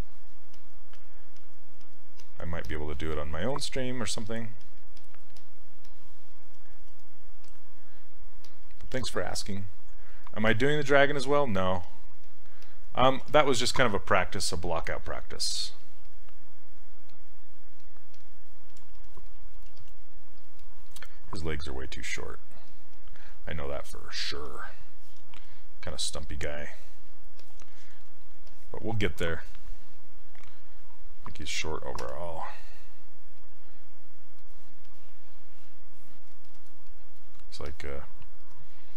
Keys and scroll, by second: 8.9 s, 19.7 s, 32.0 w.